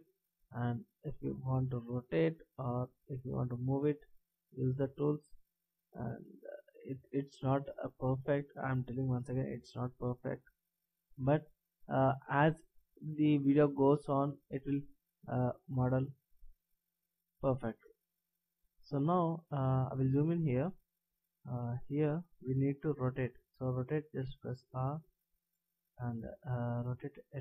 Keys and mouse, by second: 3.3 click, 15.3 e, 18.5 click, 24.3 r.